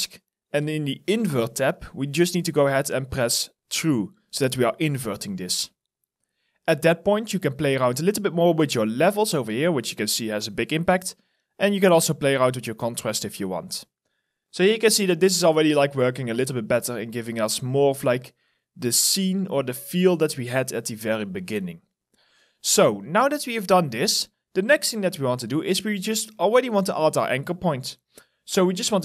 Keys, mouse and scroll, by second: 3.8 scroll down 1, 4.6 alt+right click, 14.4 alt+middle click, 15.0 alt+right click, 21.5 alt+right click, 22.3 alt+middle click, 23.6 alt+right click, 25.2 alt+click.